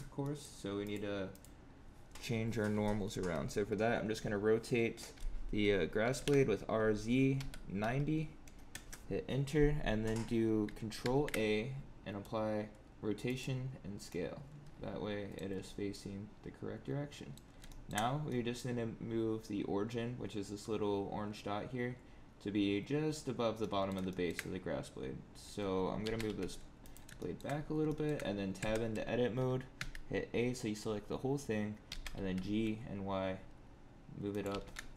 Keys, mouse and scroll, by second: 0.1 middle click, 0.8 click, 1.2 click, 6.0 r, 10.9 ctrl+a, 14.0 middle click, 15.5-15.8 scroll up 5, 15.8 middle click, 17.6 shift+middle click, 17.9 scroll down 2, 18.2 middle click, 23.5 middle click, 24.0 shift+middle click, 25.5-25.9 scroll down 4, 25.9 g, 27.1 shift+middle click, 27.5 scroll up 2, 27.8 shift+middle click, 28.5 Tab, 29.7 a, 31.8 g, 34.4 g.